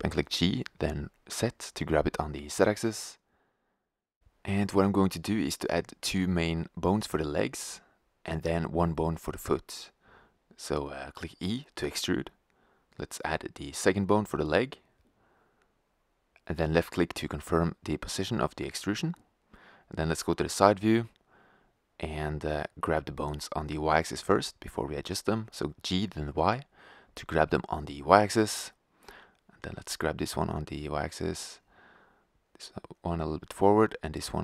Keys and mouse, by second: 3.5 click, 4.1 g, 8.0 g, 13.0 g, 14.7 e, 18.3-19.4 drag, 19.4 KP_3, 20.1 click, 21.8 b, 23.8 g, 27.7-28.8 drag, 29.5 click, 29.6 g, 30.6 click, 31.5 g, 33.5 g.